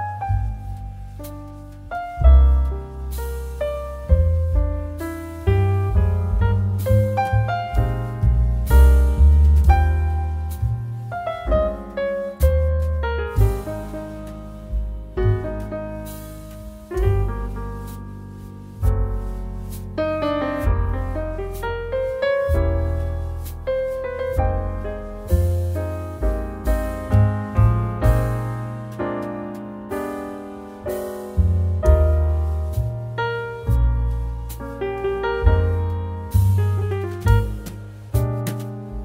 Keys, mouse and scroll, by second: 4.6-9.5 drag, 9.5 double click, 11.1 click, 23.0-23.9 click, 34.7-37.0 drag.